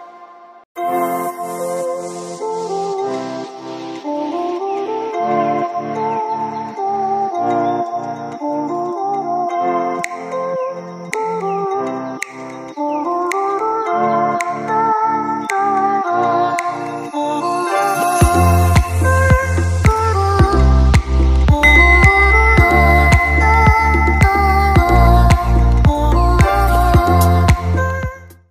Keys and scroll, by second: 3.4 ctrl+-, 3.6 space, 10.2 ctrl+z.